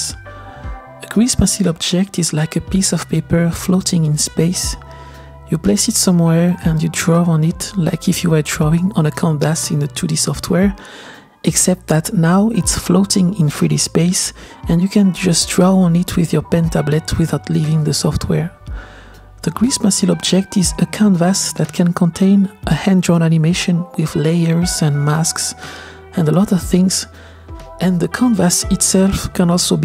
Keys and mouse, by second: 0.0-3.1 drag, 3.5-4.6 middle drag, 4.6 g, 6.1 middle click, 6.1 r, 6.7 KP_0, 7.1-8.0 drag, 8.3-9.6 drag, 10.2-11.2 drag, 11.8 click, 12.7-15.4 middle drag, 16.5-17.6 middle drag, 19.8 ctrl+z, 19.8 click, 20.8 click, 21.8 click, 22.9-26.4 drag, 29.0-29.8 shift+middle drag.